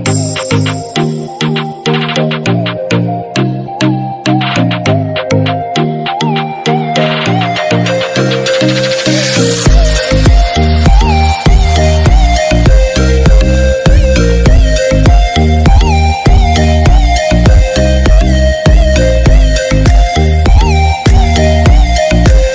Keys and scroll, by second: 11.5 ctrl+-.